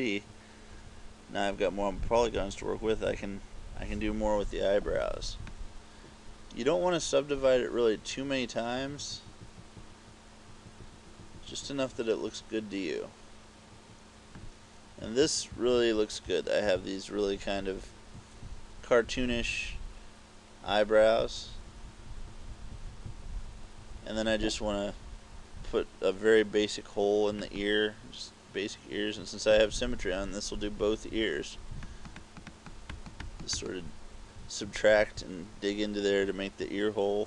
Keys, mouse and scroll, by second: 1.3-3.1 typing, 5.7 click, 15.3-19.3 typing, 20.7-23.8 typing, 27.5 click, 32.0 click, 32.3 click, 32.6 click, 33.1 click, 33.4 click, 33.7 click, 34.7 KP_6, 35.1 KP_6.